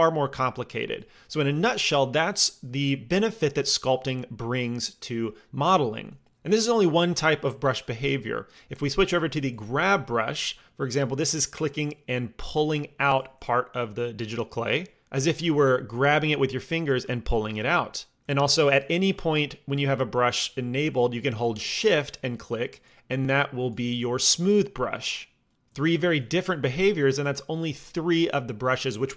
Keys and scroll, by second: 1.0 Tab.